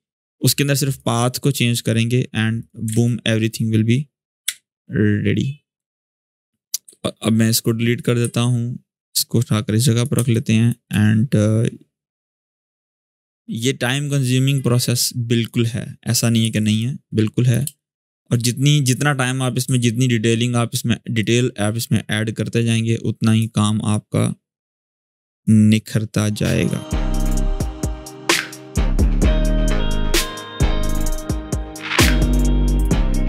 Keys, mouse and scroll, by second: 2.7 ctrl+d, 4.2 g, 6.0 click, 9.9 space, 10.1 click, 10.4 space, 12.1-15.5 drag, 16.2 v, 16.3-17.3 click, 17.4 space, 17.5 click, 17.9 space, 18.6 click, 19.4 g, 21.0-23.1 drag, 24.6-25.2 click, 25.5-26.7 drag, 26.8-27.5 click, 27.5 scroll down 1, 27.7 space, 29.8-30.4 click, 30.3 space, 32.8 space.